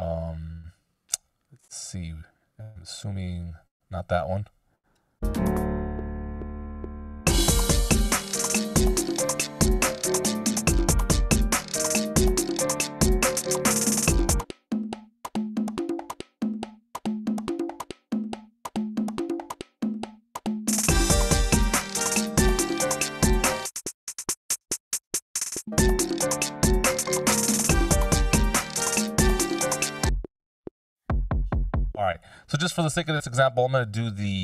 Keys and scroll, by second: 4.9 space, 32.0 space.